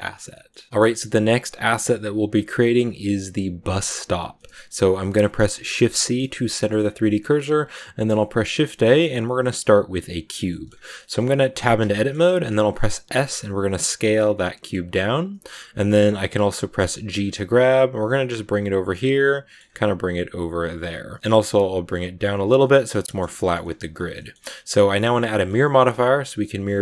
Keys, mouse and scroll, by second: 1.0-3.6 shift+middle drag, 4.3-5.5 shift+middle drag, 5.5 shift+c, 6.2 shift+middle click, 6.7 scroll up 2, 8.0 shift+a, 10.4 shift+middle click, 10.6 scroll up 2, 10.9 middle click, 11.6 Tab, 11.8-13.1 shift+scroll up 3, 11.8 shift+middle click, 13.1 s, 16.3 scroll down 1, 16.4 middle click, 16.7-17.1 scroll up 1, 17.1 g, 18.7 scroll down 1, 18.8-19.9 middle drag, 19.9 g, 20.8 middle click, 21.2 g, 22.5 middle click, 23.5 scroll up 2, 24.1-26.8 shift+middle drag.